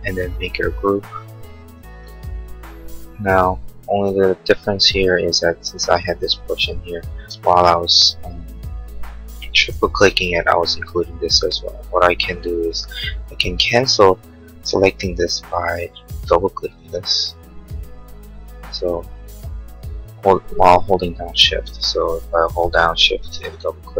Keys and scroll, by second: 0.6 g, 7.4 ctrl+z.